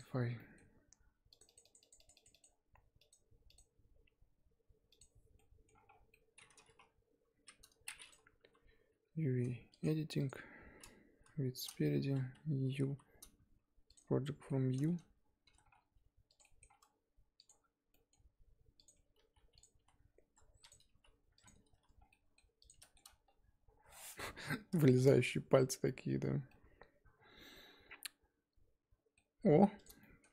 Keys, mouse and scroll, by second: 0.0 click, 0.4-1.4 middle drag, 1.4-5.3 drag, 5.3 middle click, 5.9 scroll down 3, 6.1 middle click, 6.5 scroll down 1, 8.3 scroll down 3, 8.4 KP_1, 10.2 click, 11.1 KP_1, 12.0 a, 14.0 u, 15.4 a, 15.9 g, 16.4-18.7 middle drag, 18.7 click, 19.1 g, 19.7 s, 20.8 g, 21.7 Tab, 22.0 scroll down 1, 22.1 middle click, 22.6 click, 22.8 shift+middle click, 23.0-23.9 scroll up 7, 23.9-26.3 middle drag, 26.3 scroll down 4, 26.5-29.3 middle drag, 29.3-29.8 scroll up 3, 29.8 click, 30.0 shift+middle click.